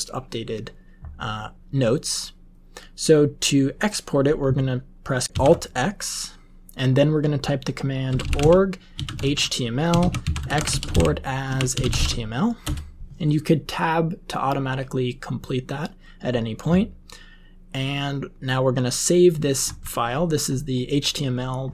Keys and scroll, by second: 5.2 alt+x, 7.8-12.5 typing, 12.6 Return.